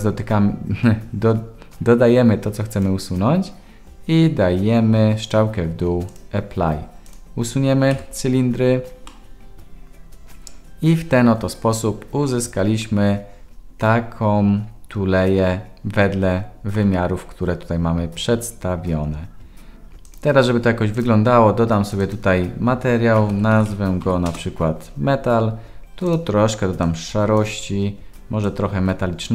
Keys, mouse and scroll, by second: 5.3-6.2 drag, 7.9 Delete, 9.1-16.7 middle drag, 20.0 click, 20.9 click, 21.8 click, 22.0 click, 26.0 click, 28.5-29.3 drag.